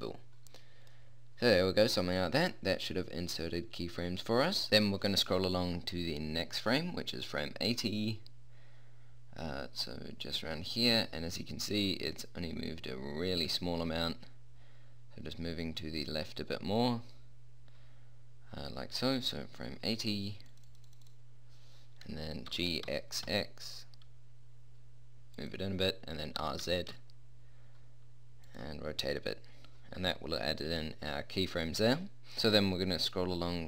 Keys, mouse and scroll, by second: 7.6-10.2 middle drag, 20.8-23.3 drag, 22.8 g, 26.7 r.